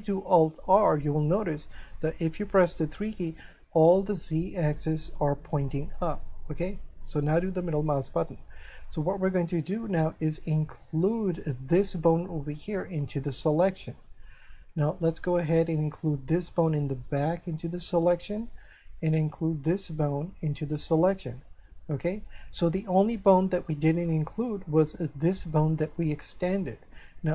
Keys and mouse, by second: 0.6 alt+r, 2.5 3, 7.5 middle click, 8.6 middle click, 10.0 shift+middle click, 13.4 shift+right click, 15.1 shift+middle click, 17.9 shift+right click, 18.5 shift+middle click, 19.2 middle click, 20.7 shift+right click, 21.8 middle click, 23.8 shift+middle click, 26.1 middle click.